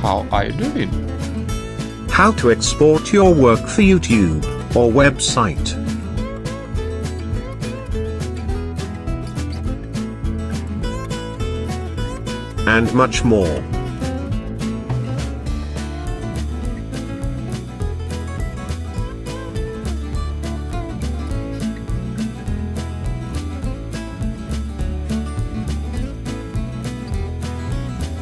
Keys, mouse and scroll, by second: 1.3 click, 8.6 click, 9.0 ctrl+scroll up 2, 9.1 ctrl+middle click, 9.7 click, 10.2 right click, 10.3 click, 10.5 click, 10.9 click, 16.2 click, 16.8 click, 22.7 click.